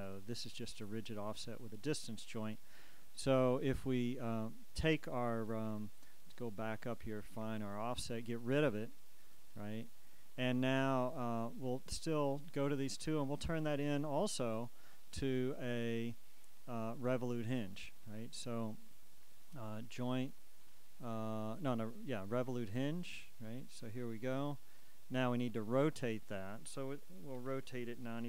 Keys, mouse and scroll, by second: 0.2-28.2 middle drag.